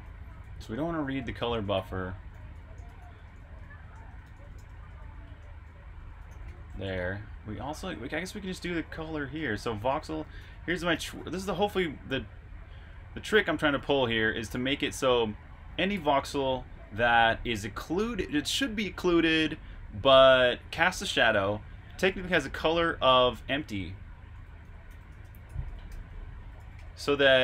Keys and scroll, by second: 0.0-0.9 typing, 2.0 typing, 12.7 typing, 24.4-26.6 typing.